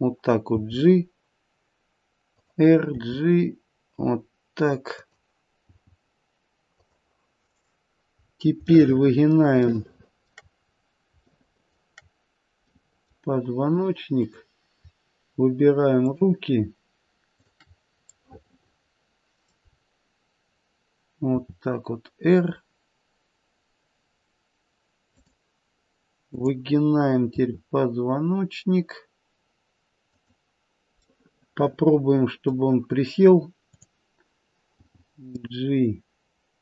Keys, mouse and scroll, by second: 0.5 g, 3.0 r, 5.6 g, 8.1-8.5 scroll up 2, 9.0 shift+middle click, 9.8 shift+middle click, 10.7-11.8 scroll up 2, 11.2 shift+middle click, 12.7 middle click, 14.1 click, 15.9 shift+click, 18.0 middle click, 18.2 middle click, 19.6-20.0 scroll down 2, 20.4-21.2 scroll down 1, 21.3 r, 26.2 click, 27.3 r, 31.0 middle click, 31.2 middle click, 31.9 middle click, 33.7 click, 34.8 g.